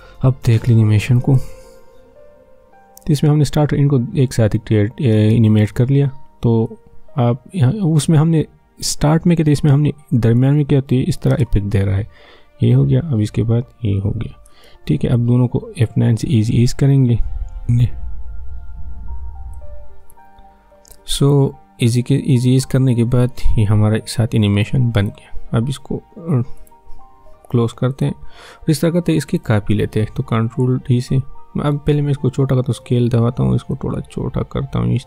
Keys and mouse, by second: 1.2 space, 5.1 space, 6.7-10.3 drag, 10.3 click, 11.3 space, 14.5 space, 15.1-17.7 drag, 17.7 F9, 19.4 click, 22.1-26.6 drag, 32.8 s, 33.7-35.0 drag.